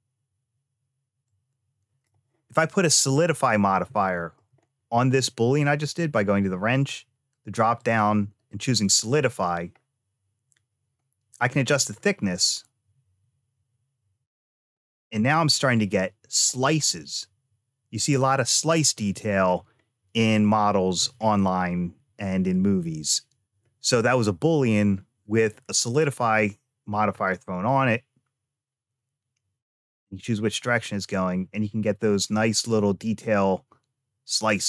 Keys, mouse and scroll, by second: 2.9-3.7 scroll up 1, 3.8 shift+middle click, 4.5-6.0 scroll up 1, 7.6-9.8 drag, 11.2-14.1 drag, 14.6 middle click, 16.4-19.3 middle drag, 19.6-20.1 scroll up 1, 20.2 shift+middle click, 21.1-22.4 middle drag, 27.5-34.6 drag.